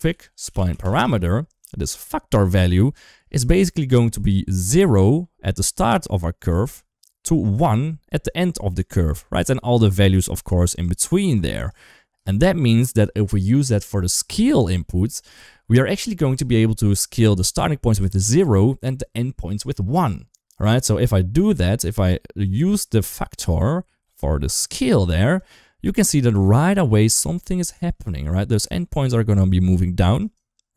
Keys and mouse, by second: 3.9 d, 4.1-6.3 drag, 6.2 d, 6.3 d, 7.0 d, 7.3-8.6 drag, 8.6-11.5 typing, 9.6 click, 10.1 click, 10.4 click, 10.7 click, 11.0 click, 11.2 click, 11.4 click, 12.1 shift+middle click, 21.2-21.9 drag, 22.5 shift+middle click, 23.9 middle click, 24.5 click, 24.7 click, 26.2 shift+middle drag, 27.9 shift+middle drag, 28.2 typing, 28.5 shift+middle drag, 30.0 ctrl+right click.